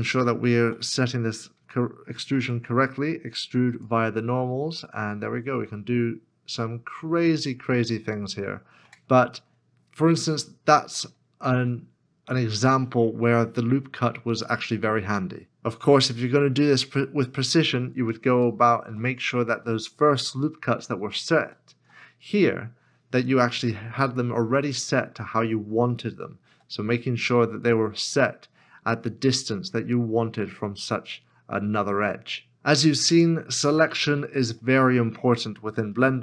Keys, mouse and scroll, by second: 0.6 ctrl+z, 2.1 alt+e, 8.8 Tab, 9.9 middle click, 16.7 middle click, 17.8-18.3 scroll up 1, 18.7 shift+middle click, 20.2 ctrl+z, 20.8 ctrl+z, 21.0 ctrl+z, 21.4 ctrl+z, 23.7 2, 24.6 alt+click, 34.8 middle click, 35.5-36.2 shift+scroll down 1.